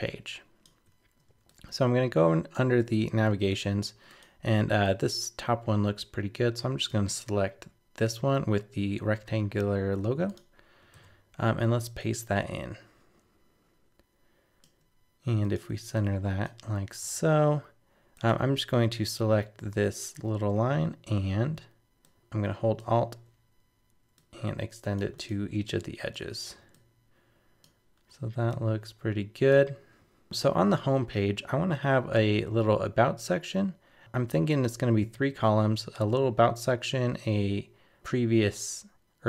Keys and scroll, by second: 9.2 super+c, 10.9 super+v.